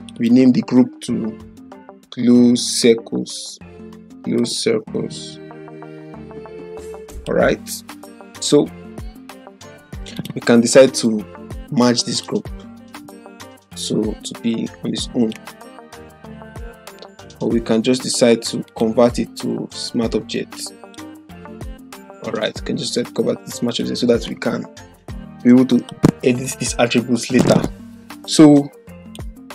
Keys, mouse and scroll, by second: 1.0-6.2 typing, 1.2 Caps_Lock, 7.1 click, 10.1 right click, 12.1-15.1 drag, 16.8 ctrl+z, 17.8 ctrl+z, 18.6 right click, 20.8-24.2 drag, 22.7-24.0 drag, 24.5-26.1 click.